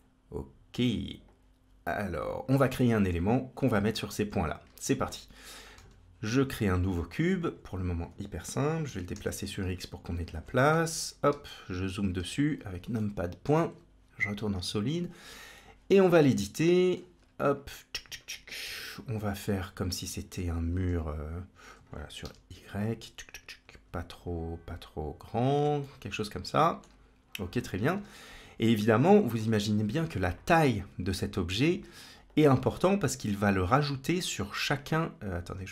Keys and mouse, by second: 1.1-2.3 drag, 4.8 shift+middle click, 5.6 shift+a, 8.7 g, 10.5 KP_1, 11.1 KP_Decimal, 12.9 middle click, 13.4 z, 14.8 Tab, 15.4-16.8 middle drag, 17.0 3, 17.5 click, 18.5 g, 25.7 middle click, 27.8 KP_1, 28.1 Tab, 32.2 click, 33.3 click, 33.6 Tab, 34.6 Tab, 35.6 z.